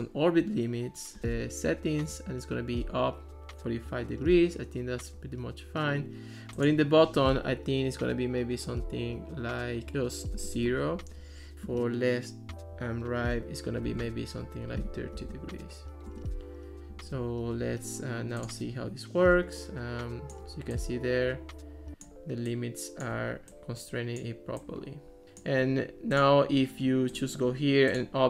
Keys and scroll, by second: 10.4 0, 10.6 Return, 13.9-15.8 typing, 16.1 Return.